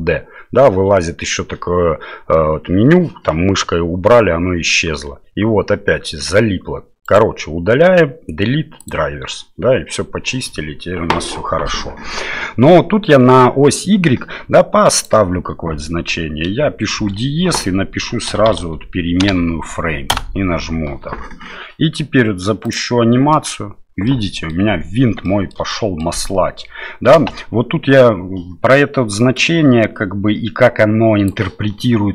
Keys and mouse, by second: 7.1-8.9 right drag, 14.9-20.8 drag, 22.7 click, 23.3 middle click, 24.1 middle click, 25.2 shift+middle click, 25.7 middle click, 27.1 space, 29.4-31.3 drag.